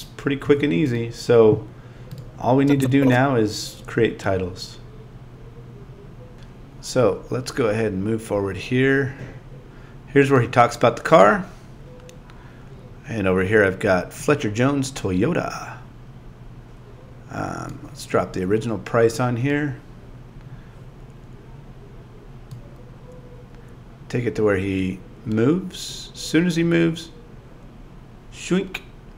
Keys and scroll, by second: 0.4 z, 2.7 a.